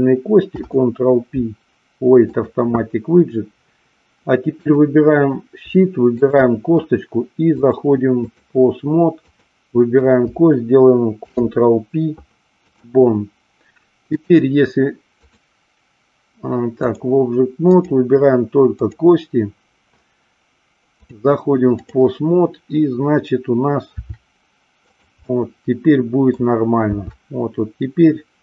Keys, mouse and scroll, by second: 0.4 ctrl+p, 4.6 click, 6.1 shift+click, 7.5 click, 9.2 click, 11.1 ctrl+p, 14.1-17.0 drag, 17.6 click, 18.8 click, 21.0 click, 24.0 r, 24.9 click, 25.2-26.2 middle drag.